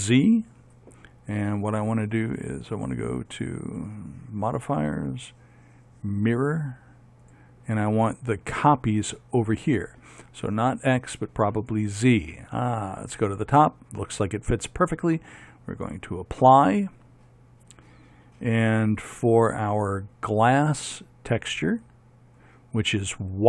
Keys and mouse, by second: 0.2 z, 12.8-19.1 drag, 20.9-23.4 drag.